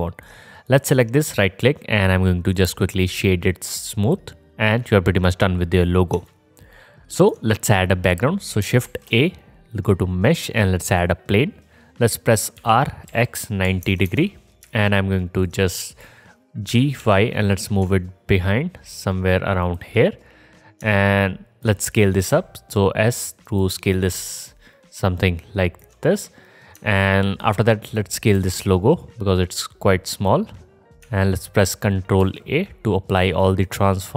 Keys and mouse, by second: 0.7 click, 8.8 shift+a, 12.6 r, 16.7 g, 22.3 s, 23.4-27.8 drag, 27.8 middle click, 27.9-34.1 drag, 28.3 s, 32.2 ctrl+a.